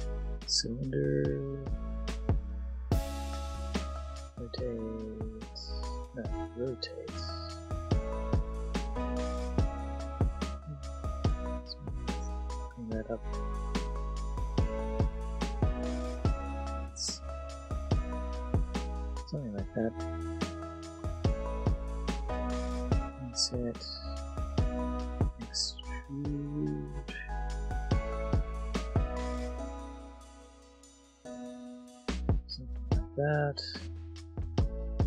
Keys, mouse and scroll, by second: 0.3 click, 2.5 click, 3.0 middle click, 4.0 s, 4.3 x, 5.1 z, 5.8 right click, 6.5 r, 6.8 x, 9.5 right click, 9.8 s, 10.3 click, 10.8 click, 11.2 click, 12.7 s, 13.0 click, 13.3 Tab, 14.1 click, 14.2 middle click, 14.3 click, 14.8 click, 15.0 middle click, 15.2 click, 15.2 middle click, 15.3 click, 16.0 middle click, 16.2 click, 16.9 middle click, 18.0 click, 20.4 middle click, 21.1 shift+click, 21.4 middle click, 22.8 shift+i, 23.8 click, 24.3 shift+middle click, 24.8 middle click, 25.5 click, 26.0 ctrl+z, 27.7 alt+e, 29.0 click, 31.8-33.9 drag, 34.6 shift+middle click.